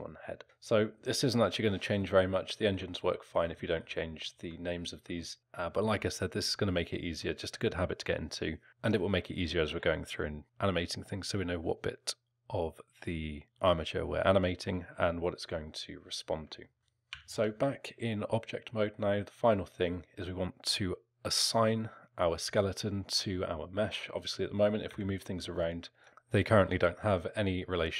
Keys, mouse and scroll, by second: 2.0 alt+middle click, 3.0 middle click, 3.6 alt+middle click, 4.3 alt+middle click, 5.2 middle click, 16.6 alt+middle click, 16.8 Tab, 17.1 Tab, 24.9 g, 26.0 ctrl+click.